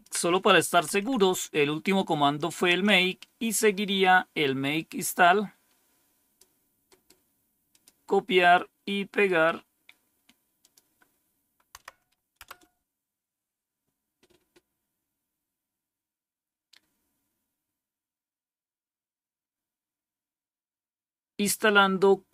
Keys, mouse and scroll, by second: 0.8 Up, 2.7 Down, 4.9-6.3 drag, 6.8 right click, 7.6 click, 8.3 click, 9.1 right click, 10.5 click, 11.7 Right, 12.3 Return.